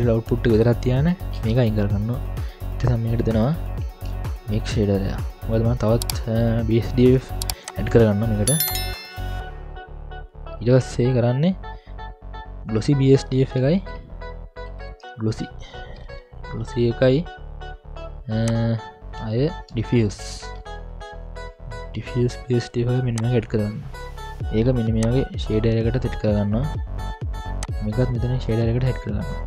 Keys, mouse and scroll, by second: 1.4 Delete, 2.1-2.4 scroll down 2, 2.4 middle click, 2.8 scroll up 2, 3.9 ctrl+alt+a, 8.7-9.2 drag, 10.0-10.6 scroll down 3, 10.3 middle click, 10.3-10.6 scroll up 1, 13.8 ctrl+alt+a, 19.3 ctrl+alt+a, 23.6 scroll down 1, 25.0-26.2 drag, 27.6-28.6 drag.